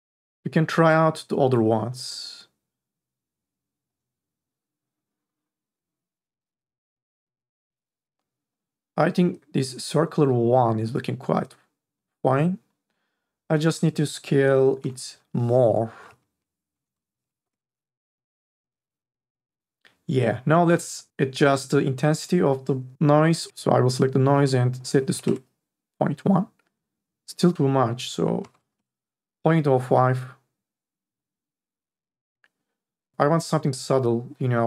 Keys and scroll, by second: 15.0 BackSpace, 16.1 5, 16.7 BackSpace, 17.1 KP_0, 17.3 KP_5, 17.6 Return, 25.2 Return, 27.5 BackSpace, 28.4 KP_0, 28.6 KP_5, 28.9 Return.